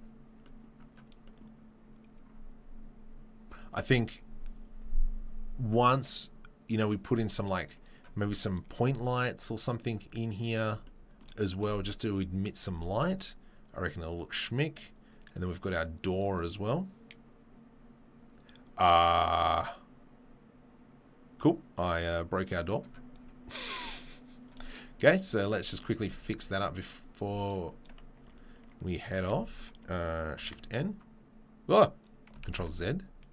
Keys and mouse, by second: 10.7-15.4 shift+drag, 15.4 middle click, 16.2-24.5 drag, 24.5-28.2 middle drag, 26.0 Tab, 28.2 Tab, 29.1 Tab, 29.3 a, 30.3 shift+n, 32.4 ctrl+z.